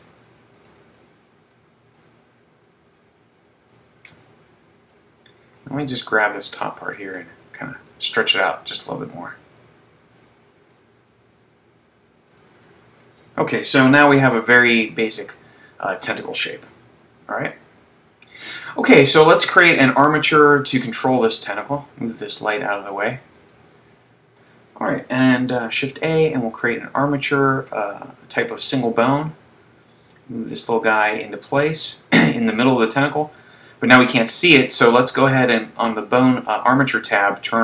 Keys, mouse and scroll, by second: 2.2 click, 4.8 z, 5.6 b, 7.9 click, 11.0 s, 12.4 click, 12.7 Tab, 14.0 z, 14.7 shift+middle click, 15.4 middle click, 17.4 KP_3, 19.2 click, 21.3 right click, 21.9 g, 23.5 click, 24.4 click, 25.5 shift+a, 29.7 g, 34.0 click, 36.4 click.